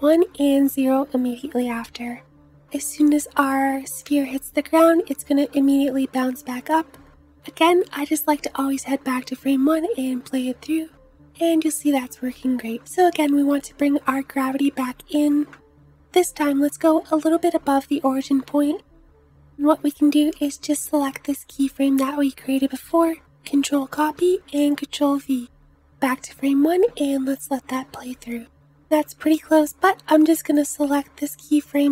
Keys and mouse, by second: 8.9 space, 12.7 space, 14.1 space, 14.5 space, 19.8-25.9 drag, 23.7 ctrl+c, 24.1 ctrl+v, 25.9 space, 29.2 space, 30.7 click.